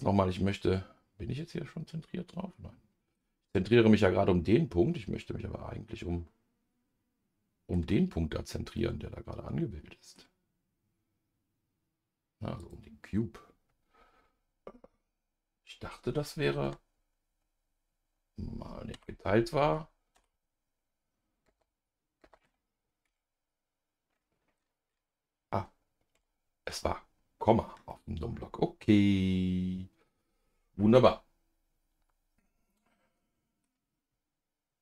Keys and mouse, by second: 4.4-10.2 middle drag, 12.6 click, 20.1 KP_Divide, 21.5 KP_0, 22.2 KP_0, 23.1 KP_Decimal, 26.1 KP_Decimal, 30.2-33.6 middle drag.